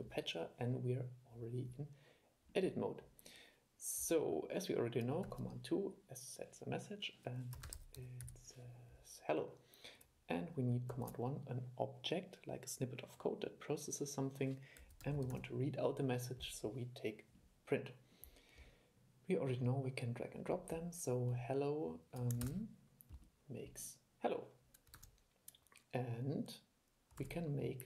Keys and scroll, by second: 5.4 super+2, 11.1 super+1, 22.6 super+e, 25.1 super+e, 27.4 super+2.